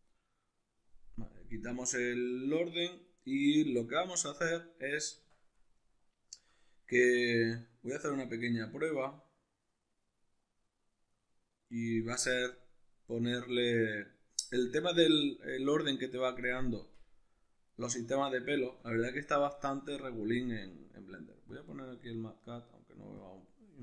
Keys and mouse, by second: 1.3-8.0 middle drag, 5.1 Tab, 8.0 alt+right click, 9.1-20.3 middle drag, 16.7 Tab, 20.3-23.8 drag.